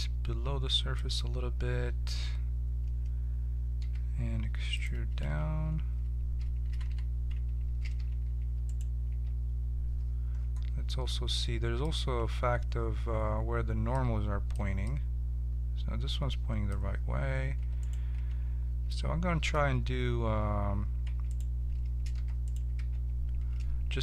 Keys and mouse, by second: 3.8 e, 5.2 z, 6.6 a, 6.8 a, 7.8 ctrl+n, 8.4 Tab, 8.6-10.7 drag, 9.0 Tab, 15.8-17.5 drag, 17.5 Tab, 17.7 right click, 18.1 Tab, 21.0 Tab, 21.2 right click, 22.1 h, 22.7 Tab.